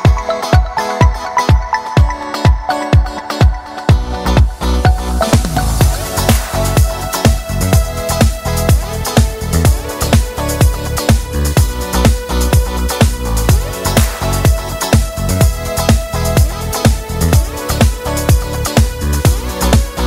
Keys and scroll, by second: 6.8 shift+super+z, 12.8 super+z, 19.3 space.